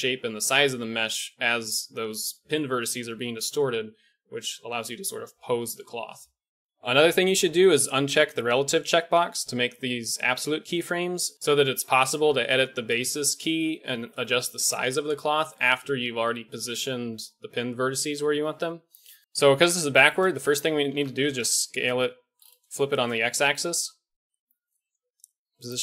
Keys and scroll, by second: 19.5 Tab, 20.2 a, 20.4 a, 20.7 s, 23.7 g.